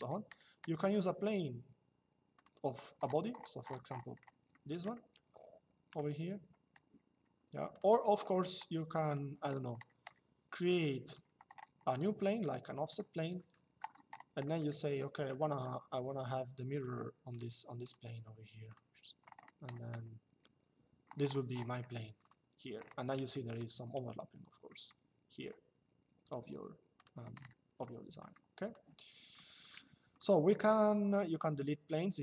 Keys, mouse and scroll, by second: 2.1 click, 4.2 middle click, 4.7 shift+middle click, 7.4 click, 10.8 click, 12.1 click, 14.2 middle click, 15.0 click, 16.4 click, 21.9 click, 23.0 middle click, 24.4 middle click, 26.7 click, 28.4 click, 29.8 click.